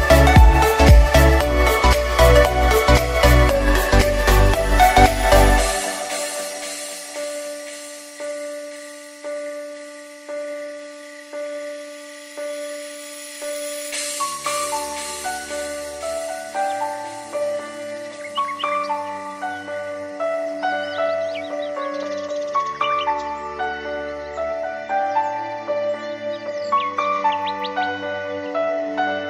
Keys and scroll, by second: 18.9 Escape, 20.8 m, 26.2 Escape.